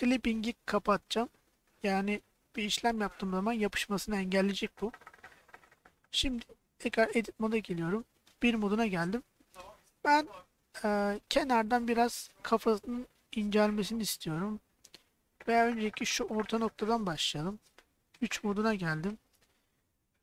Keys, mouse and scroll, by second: 0.8 click, 6.6 middle click, 7.1 Tab, 8.4 KP_1, 14.4-15.5 middle drag, 18.1 KP_3.